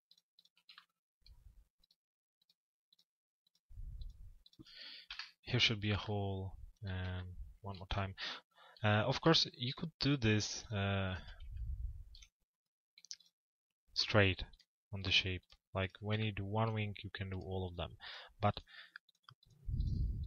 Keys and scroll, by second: 4.7 Delete.